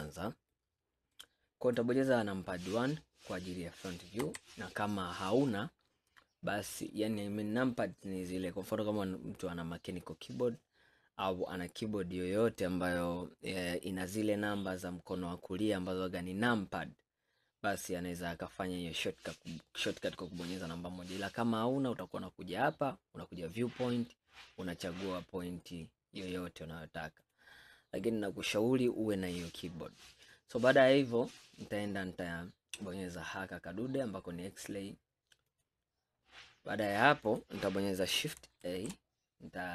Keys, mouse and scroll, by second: 0.6-3.7 middle drag, 4.3 KP_1, 5.6 scroll down 1, 5.9-6.4 scroll up 4, 22.1-25.2 drag, 31.4 scroll up 2, 35.5-37.5 drag, 38.7 shift+a.